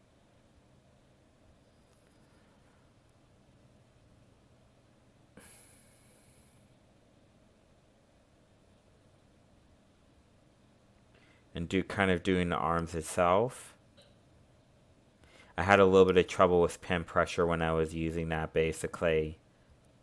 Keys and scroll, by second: 13.8 ctrl+z, 18.1 ctrl+z.